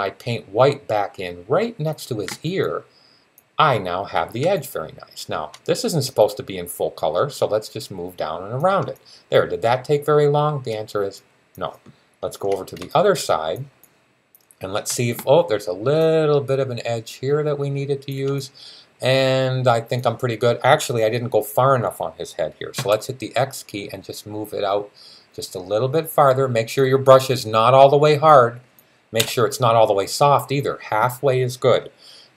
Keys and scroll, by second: 22.6 x.